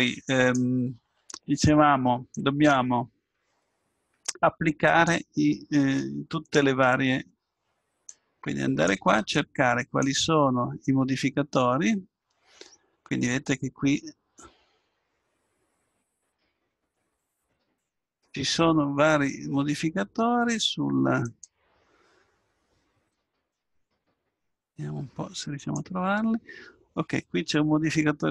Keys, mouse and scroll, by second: 2.3-11.2 drag, 16.3-18.2 drag, 21.3-27.4 drag.